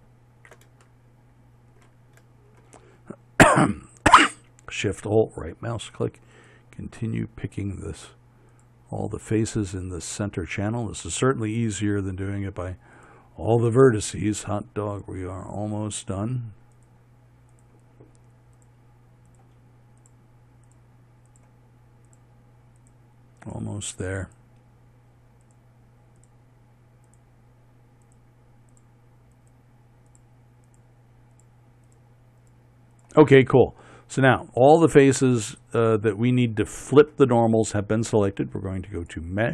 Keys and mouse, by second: 36.8-39.0 middle drag.